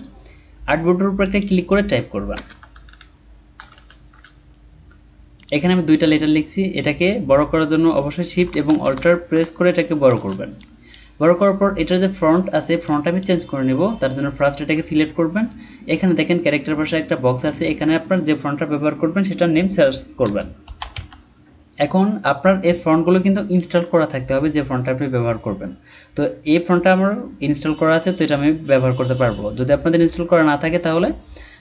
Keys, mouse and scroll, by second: 2.3 BackSpace, 3.6-4.0 typing, 8.8 alt+shift+click, 20.2-21.4 typing.